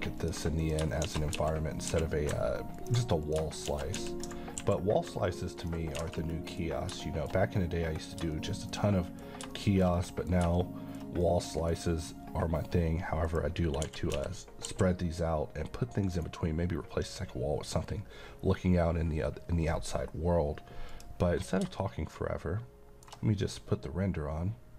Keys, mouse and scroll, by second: 0.2 ctrl+click, 0.6 click, 1.1-1.9 typing, 2.8 click, 3.7 shift+d, 4.0 x, 4.6 y, 5.6 ctrl+click, 5.9 a, 6.2-6.8 middle click, 6.7 scroll up 1, 7.0 middle click, 7.5 scroll down 1, 7.6-8.2 middle click, 8.0 scroll up 1, 8.3-9.1 shift+middle drag, 10.6 shift+middle click, 11.3-11.8 middle drag, 13.3 click, 13.9-14.7 typing, 16.2 right click, 20.9 click, 21.8-24.7 middle drag.